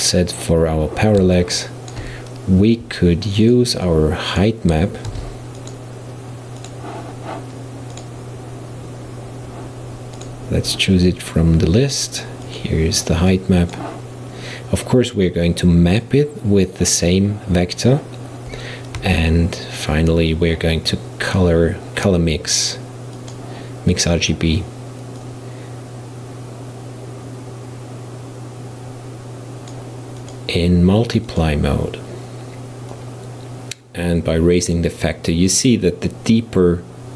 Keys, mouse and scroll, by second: 1.4-3.5 shift+middle drag, 3.5-5.1 drag, 5.1 shift+d, 6.6 click, 8.0-10.3 drag, 13.3-15.0 drag, 19.0 shift+a, 25.3 click, 30.2-36.0 drag.